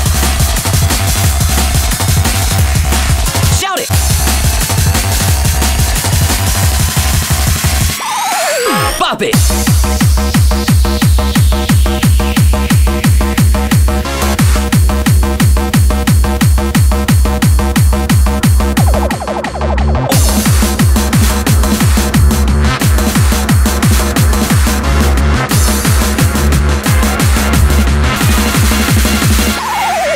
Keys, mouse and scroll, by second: 10.5-13.0 middle drag, 14.7 b, 19.0 b, 21.1 b.